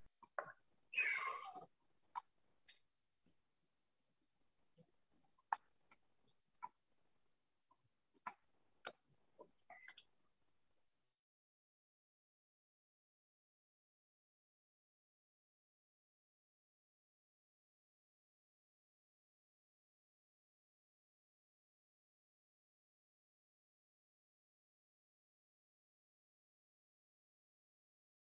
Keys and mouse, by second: 5.6 right click.